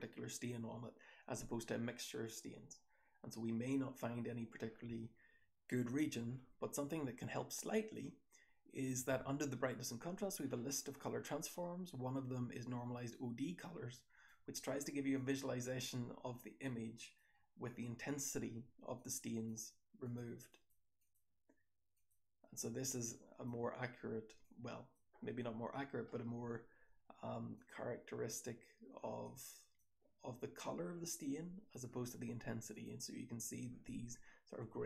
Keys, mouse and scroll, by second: 1.2-2.6 scroll down 1, 2.6-3.9 scroll down 1, 3.9-5.6 scroll down 1, 5.6 click, 5.6 scroll down 1, 15.1 click, 16.3-17.1 drag, 17.5-17.9 drag, 23.0-23.4 drag, 24.3-24.9 drag, 26.1-27.3 scroll up 1, 27.3 scroll up 1, 29.2-29.7 drag, 31.2-31.6 drag.